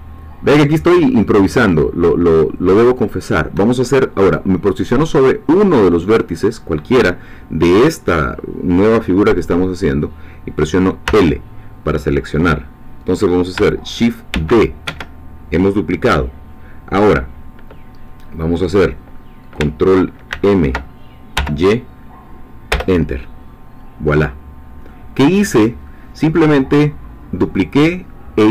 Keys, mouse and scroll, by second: 3.0 shift+click, 11.0 l, 14.3 shift+d, 14.9 Escape, 20.3 ctrl+m, 21.3 y, 22.7 Return, 23.8-24.4 scroll down 2, 24.9-28.5 middle drag.